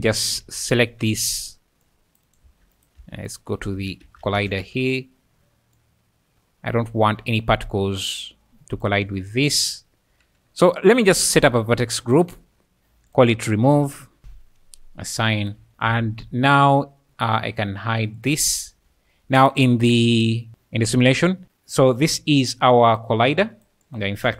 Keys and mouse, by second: 0.4 alt+a, 0.9 c, 2.3 click, 2.4 1, 3.0 Tab, 3.3 click, 3.8 Tab, 4.0 1, 4.4 alt+a, 4.6 c, 5.8 click, 8.5 alt+a, 8.5 c, 9.2 shift+click, 9.7 `, 11.2 click, 12.1 click, 13.2-14.2 drag, 15.4 click, 15.6 Tab, 15.7 Tab, 15.8 z, 16.2 `, 16.7 `, 18.2 click, 18.6 `, 22.7 click.